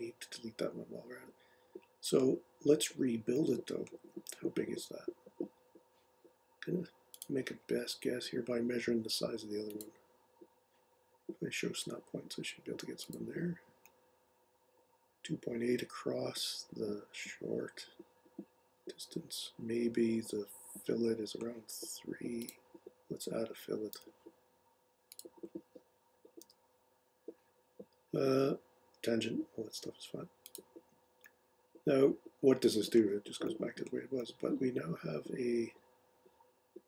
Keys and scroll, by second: 23.9 f, 26.4 3.